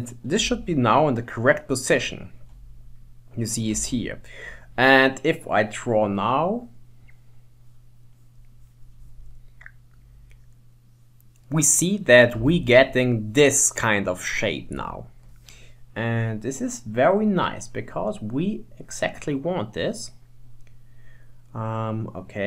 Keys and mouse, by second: 0.7-3.1 shift+middle drag, 3.7 middle click, 5.7 middle click, 6.5-8.4 drag, 9.0 click, 9.9 click, 11.5-16.2 middle drag, 16.4 click, 16.8 click, 17.4 click, 18.6 click, 20.3 click, 22.0-22.4 drag.